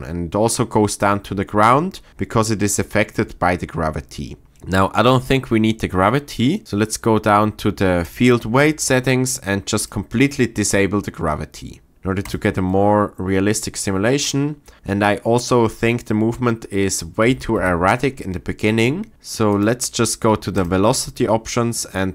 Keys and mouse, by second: 8.1 click, 9.4 click, 12.2 click, 17.6 shift+Left, 19.5 click, 20.6 click.